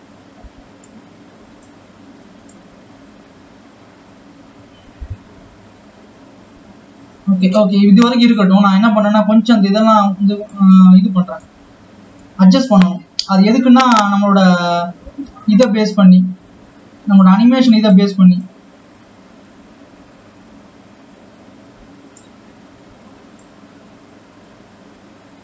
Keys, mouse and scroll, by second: 2.3-4.8 drag, 8.2 drag, 12.3 g, 18.7-22.0 drag, 23.5-25.4 drag.